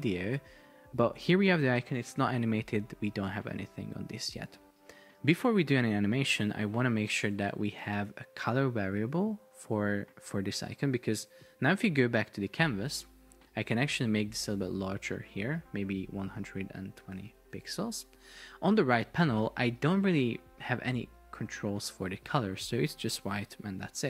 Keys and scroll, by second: 0.4 shift+super+4, 1.7 Escape, 17.6 Return.